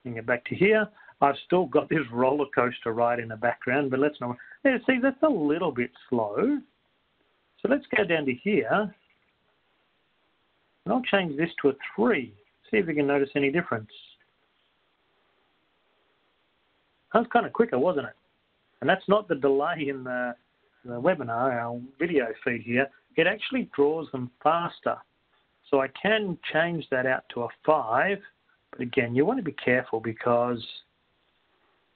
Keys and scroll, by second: 0.9 Right, 0.9 2, 9.2 Down, 14.6 3, 15.2 Up, 26.9 Down, 26.9 3, 29.9 5.